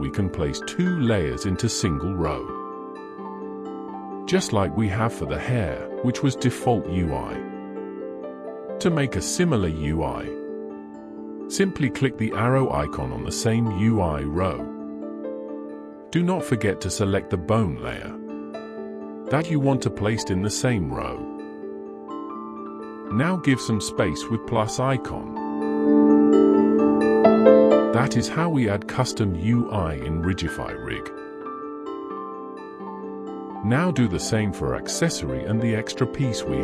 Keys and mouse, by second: 19.7 click, 22.3 click.